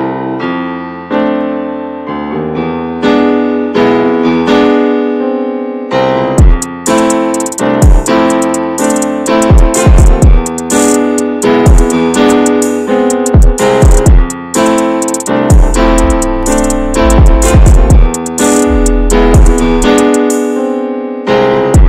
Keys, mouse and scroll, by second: 0.8-1.2 scroll up 1, 1.2-1.6 scroll down 2, 1.6-2.7 shift+middle drag, 2.7 right click, 3.0-3.9 scroll down 3, 4.2-10.3 shift+middle drag, 10.3 click, 11.1 shift+middle click, 11.3-12.2 scroll up 5, 11.6 middle click, 12.2 shift+middle click, 12.4-12.8 scroll up 3, 12.8 middle click, 13.1-13.5 scroll down 7, 13.7-14.7 middle drag, 14.7-15.3 scroll up 2, 15.3 shift+middle click, 15.5-15.9 scroll up 3, 16.2 shift+middle click, 17.4 alt+middle click, 17.7 alt+middle click.